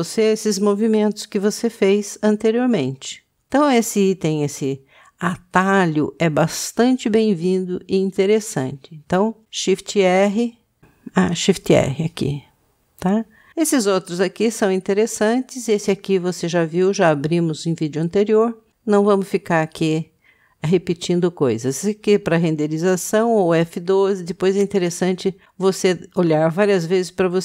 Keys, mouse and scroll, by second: 7.9 click.